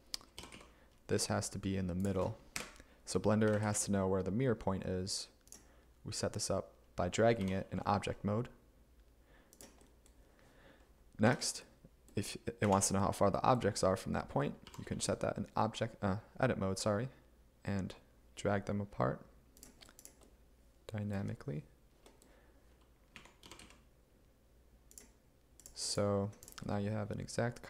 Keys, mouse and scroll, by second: 0.4 g, 0.6 x, 2.6 Up, 3.5 g, 3.7 x, 7.5 g, 7.7 x, 11.3 Tab, 12.7 a, 14.7 g, 23.2 a, 23.5 g, 23.7 z.